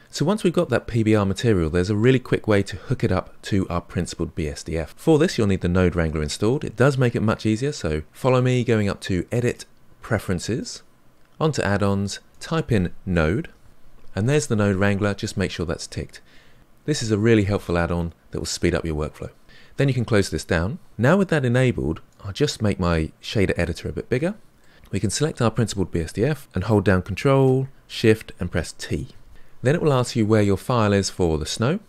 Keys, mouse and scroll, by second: 10.8-13.6 drag, 22.3-24.7 drag, 28.9 ctrl+shift+t.